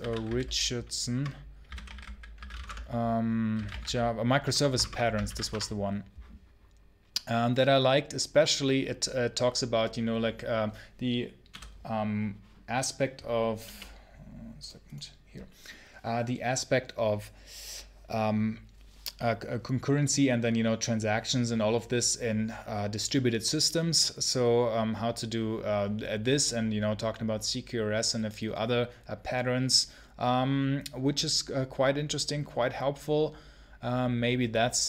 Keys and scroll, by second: 0.0-4.3 typing, 5.1 Down, 5.3 Return.